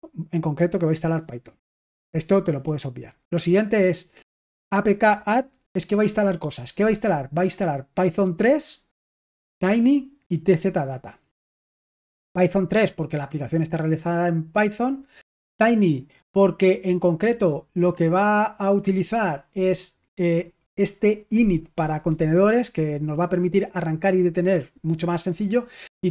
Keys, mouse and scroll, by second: 0.9 click, 4.4-5.6 drag, 7.6 click, 7.9 click, 9.2 click, 9.5 click, 10.6 click, 10.8 click, 12.1 click, 12.5 click, 15.4 click, 15.7 click, 16.6 click, 16.8 click.